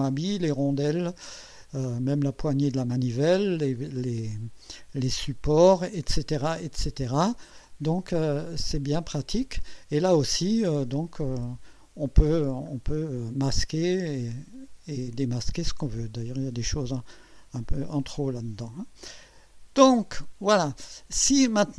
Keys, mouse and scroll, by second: 1.7 scroll down 1, 4.3-8.5 drag, 10.5 scroll up 1, 12.4-12.8 scroll down 1, 19.7 click.